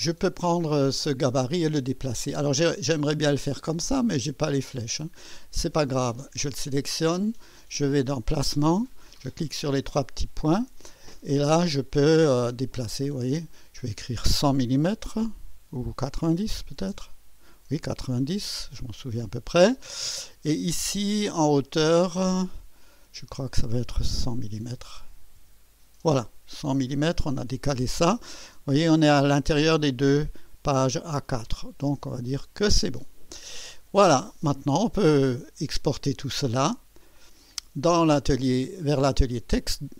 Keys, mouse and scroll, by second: 2.9 right click, 4.0 click, 6.0 click, 8.9 click, 9.9 click, 12.4 scroll up 1, 12.9-13.3 scroll down 2, 13.3 scroll up 2, 13.6 click, 16.5-17.4 typing, 22.8 click, 24.5 KP_1, 24.8 KP_0, 32.2 click, 37.2 click, 39.2 click.